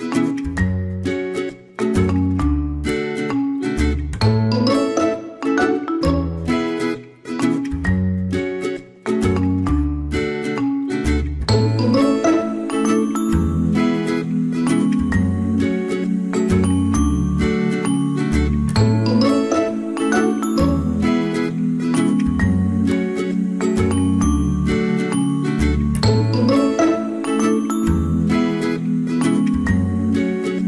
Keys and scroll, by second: 14.0 ctrl+x, 15.2 ctrl+f.